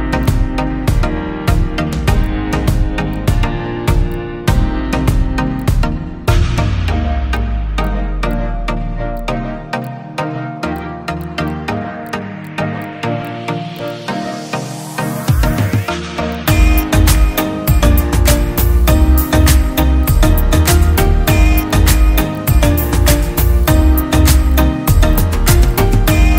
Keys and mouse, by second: 1.4 space, 2.2 click, 3.2 click, 3.9 middle click, 4.1-5.3 drag, 5.6-7.1 drag, 7.3 click, 9.1 click, 9.3 space, 9.8 click, 9.8 space, 11.2 click, 12.0 click, 12.4 click, 12.8 click, 13.2 click, 13.9 click, 14.1 space, 14.6 space, 15.7-16.9 drag, 17.1 click, 18.3-20.8 ctrl+drag, 21.0-23.1 drag, 23.1 space, 25.1 click, 25.6 click, 26.2-26.3 drag.